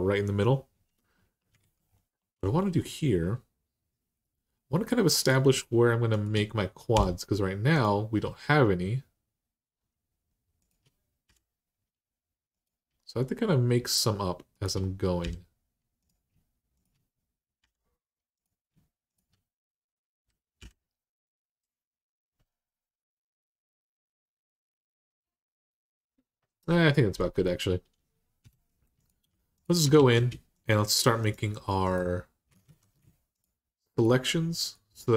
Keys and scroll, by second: 1.4 alt+z, 6.7 j, 11.0 j, 15.3 j, 17.4 j, 20.4 j, 28.2 2, 29.7 alt+z, 32.4 ctrl+z.